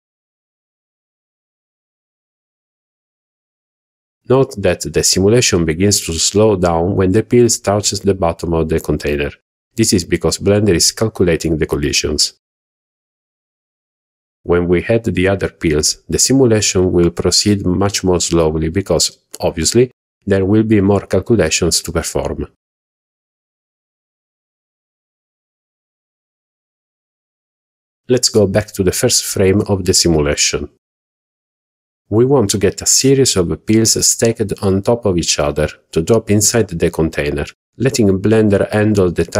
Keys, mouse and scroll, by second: 15.7-17.0 middle drag, 17.2-17.6 scroll up 1, 18.0 scroll up 1, 18.7-21.5 shift+middle drag, 26.0 click, 30.6 click, 32.3-32.9 scroll down 3, 33.3-33.6 shift+middle drag, 33.9 scroll up 1.